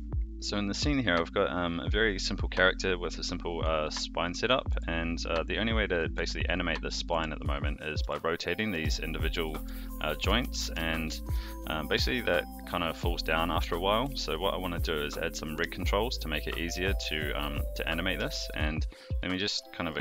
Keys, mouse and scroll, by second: 0.0 a, 3.5 click, 4.1 click, 4.7 r, 5.9 click, 6.1-10.1 typing, 6.9 click, 7.9 click, 8.5 click, 9.3 click, 10.4 alt+g, 10.6 alt+r, 11.1 shift+middle drag, 12.0 shift+middle drag, 12.5-13.0 middle drag, 13.3-14.2 middle drag, 18.3 shift+middle drag, 18.8 click, 19.1 middle drag.